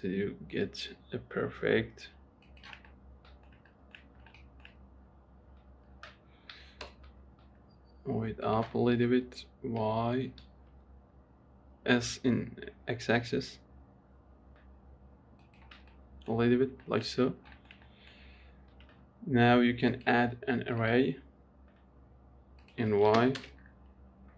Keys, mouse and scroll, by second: 3.2-4.3 middle drag, 4.3-4.6 scroll up 2, 4.6-6.8 shift+middle drag, 6.8 g, 9.2 s, 16.2 middle click, 16.7-17.1 scroll down 1, 17.1 shift+middle click, 17.5-17.8 scroll down 4, 17.8-20.2 shift+middle drag, 21.2-24.3 drag.